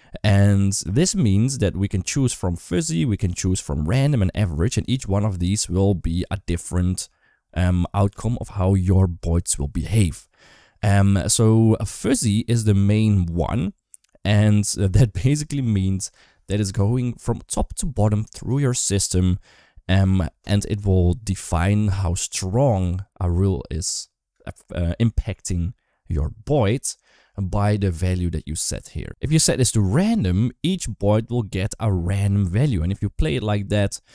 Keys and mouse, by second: 3.1-10.2 drag, 28.9 space.